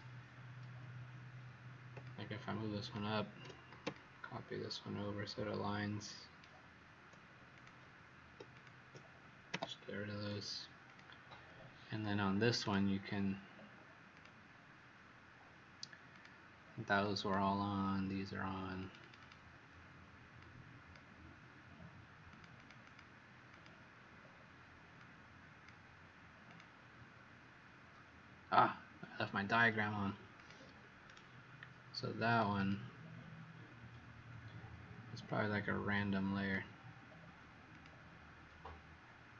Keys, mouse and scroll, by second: 1.9 shift+click, 3.9 alt+shift+click, 8.4 shift+click, 9.4 Delete, 10.8 click, 12.5 right click, 14.0 click, 18.9 click, 19.2 click, 20.3 click, 22.5 click, 22.8 click, 23.4 click, 24.9 click, 31.0 right click, 32.5 click.